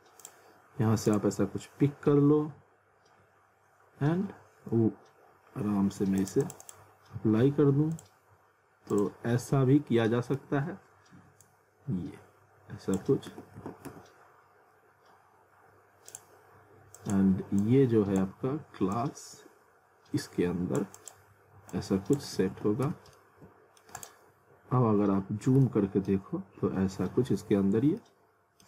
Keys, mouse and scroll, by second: 6.2 click, 10.1 middle click, 11.4 click, 13.3 alt+w, 13.9 z, 16.1 click, 22.4 alt+w, 22.8 z, 23.2 alt+middle click, 24.0 click, 24.4-24.9 scroll up 1, 25.3 scroll down 1, 25.6 alt+middle click, 26.3-26.7 scroll up 1, 26.9 scroll down 1, 27.7 scroll up 1, 28.0 alt+middle click.